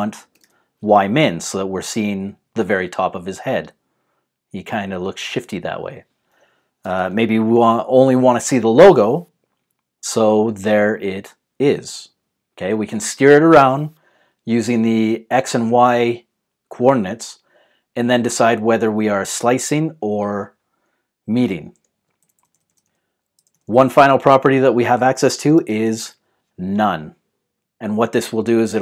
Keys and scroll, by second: 0.5-0.8 typing, 6.9-8.0 typing, 22.2 shift+Left, 22.3 shift+Left, 22.5-24.1 shift+Left, 22.6 shift+Left, 22.8 shift+Left, 23.3 shift+Left, 23.8 shift+Left, 24.2-28.8 shift+Left, 25.3-26.5 typing.